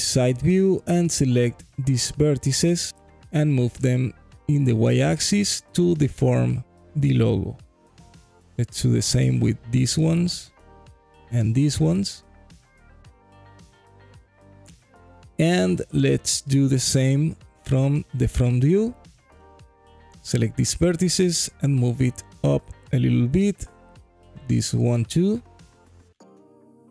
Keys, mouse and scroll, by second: 0.1 click, 2.1 g, 2.7 y, 5.7 click, 6.7 click, 7.6 g, 9.3 click, 9.9 click, 10.3 g, 11.5 click, 12.1 click, 12.6 g, 13.3 click, 14.0 click, 14.5 g, 15.6 click, 16.4 KP_1, 17.3 scroll down 1, 17.8 alt+middle click, 18.6 click, 20.2 g, 20.6 z, 21.9 click, 22.5 click, 23.8 shift+click, 25.4 g, 25.8 z.